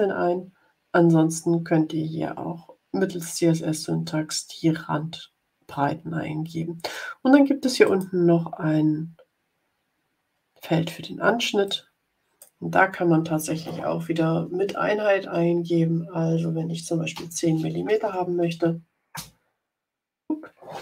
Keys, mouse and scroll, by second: 7.7 click, 11.6 click, 16.8-17.8 typing, 19.0 Return.